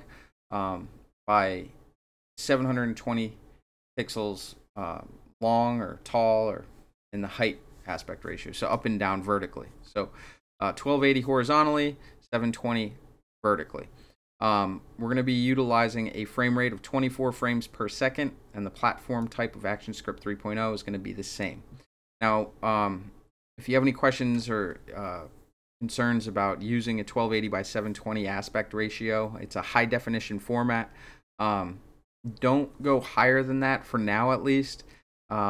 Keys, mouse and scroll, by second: 19.2 click, 21.3 click.